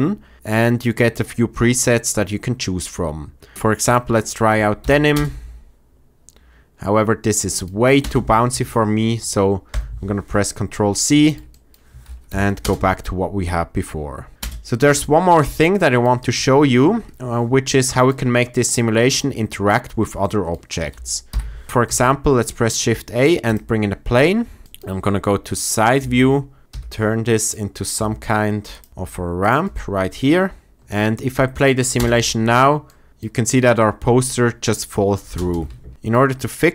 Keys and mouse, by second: 4.7 shift+Left, 5.1 space, 8.4 ctrl+space, 9.7 ctrl+z, 12.2 shift+Left, 12.5 space, 14.8 space, 17.7 click, 21.2 shift+Left, 21.8 shift+a, 24.6 shift+KP_3, 26.0-28.9 typing, 27.3 click, 28.6 click, 29.3-29.7 drag, 31.9 space, 32.8-34.7 drag, 35.3 space, 35.9 shift+Left.